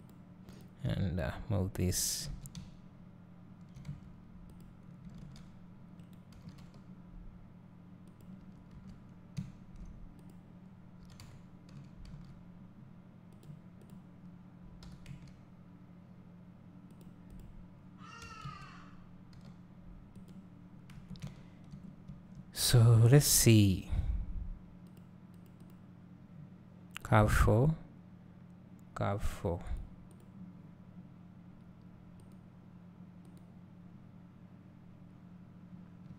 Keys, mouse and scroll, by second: 0.5 click, 0.9 g, 3.9 Tab, 4.6 click, 5.3 alt+s, 6.4 g, 8.6 Tab, 9.4 `, 10.2 click, 11.1 g, 13.4-14.0 drag, 14.9 g, 17.0-17.4 drag, 18.3 g, 20.2-21.0 drag, 21.1 Tab, 21.3 `, 22.8 click, 27.5 click, 29.8 click, 30.2 click.